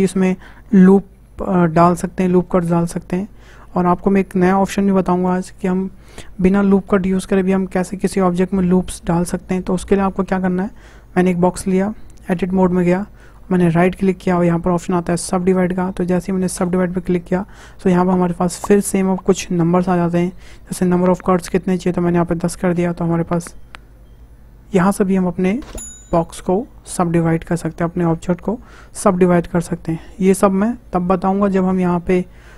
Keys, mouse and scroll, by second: 3.7-5.5 middle drag, 5.5 Delete, 6.8 shift+a, 8.5-9.0 scroll up 2, 9.0-12.3 shift+middle drag, 12.3 Tab, 13.0 shift+middle click, 13.8-17.7 right drag, 21.8-23.1 drag, 23.1-26.2 middle drag, 31.8-32.5 drag.